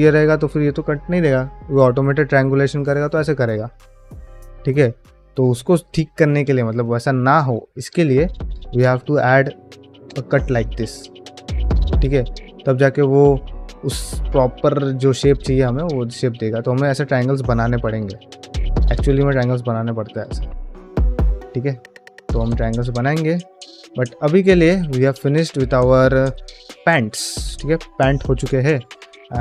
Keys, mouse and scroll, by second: 1.1 ctrl+t, 1.5 ctrl+middle click, 1.8-3.5 middle drag, 4.0 ctrl+z, 4.4-5.9 middle drag, 8.2 click, 8.8 shift+click, 9.9 j, 10.5 ctrl+middle click, 10.8-11.9 middle drag, 12.1 ctrl+middle click, 12.5 ctrl+middle click, 12.7 shift+middle click, 13.0 middle click, 13.6 ctrl+middle click, 14.7-15.9 middle drag, 17.2 middle click, 17.5 ctrl+middle click, 17.8 shift+middle click, 18.1 ctrl+middle click, 18.4 middle click, 18.8 ctrl+middle click, 19.2 shift+middle click, 19.5 middle click, 20.2 shift+middle click, 20.5 middle click, 21.1 ctrl+middle click, 21.5 ctrl+Tab, 22.1 click, 22.4 ctrl+middle drag, 22.7 shift+middle drag, 23.1 middle click, 23.5-23.8 middle drag, 24.0 shift+middle drag, 24.3 ctrl+middle drag, 24.7-26.2 middle drag, 26.5 shift+middle click, 26.8 ctrl+middle click, 27.0 middle drag.